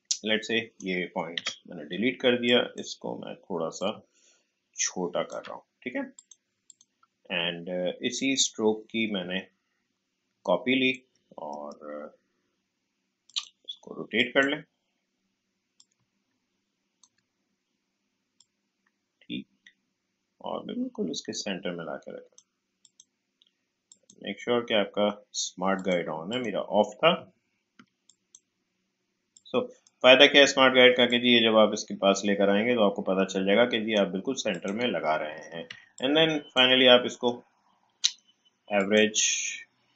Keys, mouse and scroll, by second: 1.3 Delete, 2.4-11.5 drag, 11.5 right click, 13.2-18.4 drag, 18.4-22.8 drag, 27.3 alt+scroll up 1, 28.0-34.5 drag, 35.6 a, 35.9 click, 37.1 right click, 38.7 click.